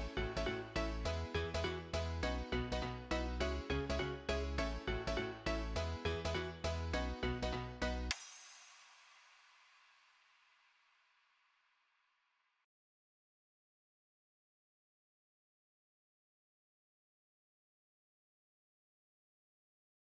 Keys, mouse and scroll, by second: 17.4 right click.